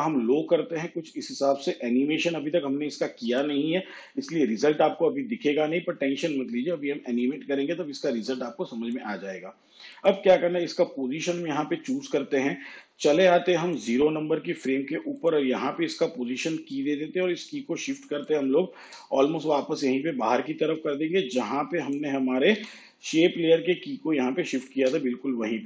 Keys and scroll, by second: 10.7 p, 22.6 u.